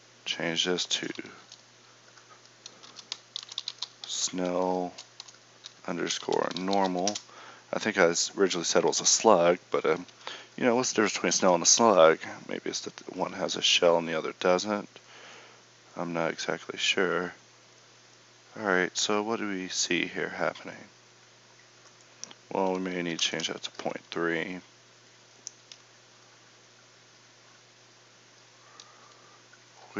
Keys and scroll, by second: 29.1 Escape.